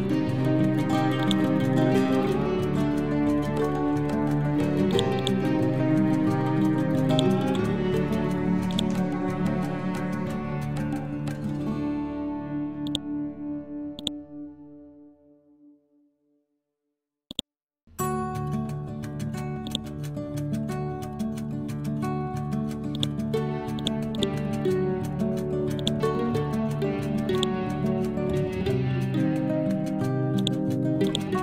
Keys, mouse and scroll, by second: 0.2 scroll up 1, 1.3-3.6 drag, 3.6 scroll down 1, 5.0 click, 7.5-8.7 scroll up 1, 8.7-10.5 drag, 10.5 scroll down 1, 11.4 scroll up 1, 12.9-25.2 drag, 25.2 ctrl+z, 25.8 click, 26.9 ctrl+g, 27.4 click, 28.5 scroll down 1, 30.4-31.4 drag.